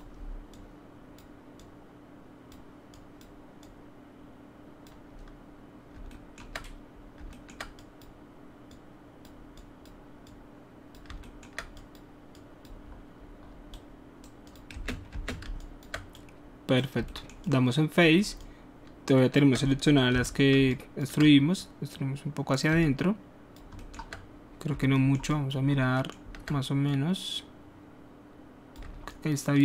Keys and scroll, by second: 14.8 space, 15.1 space, 20.1 alt+r.